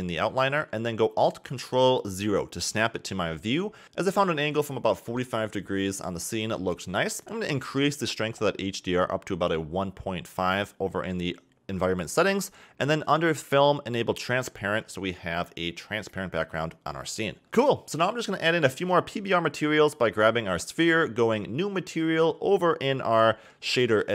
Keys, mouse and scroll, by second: 1.1 g, 1.6 r, 2.8-5.6 typing, 3.7 scroll up 3, 7.3-10.5 drag, 12.2 click, 13.0-13.5 scroll down 5, 13.8 click, 14.0-14.8 scroll down 5, 14.9 click, 16.1 scroll up 4, 16.7 a, 16.8 a, 17.9 click, 21.4 click, 22.4 click, 24.0 ctrl+shift+t.